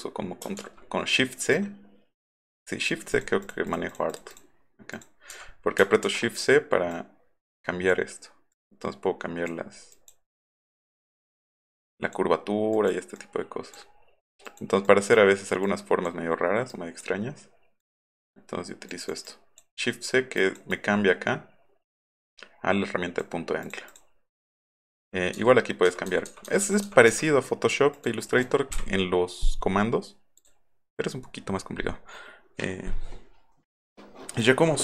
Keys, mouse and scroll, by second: 0.6 shift+v, 1.4 click, 2.3-2.9 drag, 3.1 click, 3.4 click, 3.7 click, 3.9 click, 4.1 click, 4.3 click, 4.9 click, 5.3 v, 6.0 shift+x, 6.9-7.9 drag, 8.5-9.5 drag, 9.9 click, 10.7 click, 11.9 click, 12.7 click, 13.2 click, 14.5 click, 14.9 click, 15.7 click, 16.7 click, 17.8 click, 18.9 click, 19.3 click, 20.4 click, 20.7-23.2 drag, 23.7 click, 23.9 click, 24.7 click, 25.4-26.9 typing, 27.9 click, 28.2 click, 30.4 click.